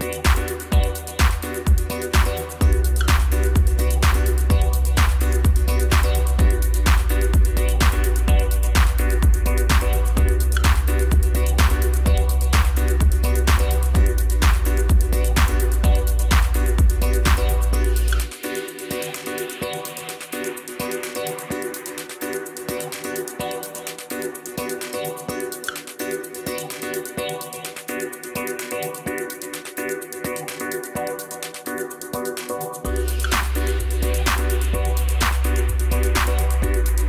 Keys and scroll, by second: 12.0 i, 17.3 alt+a.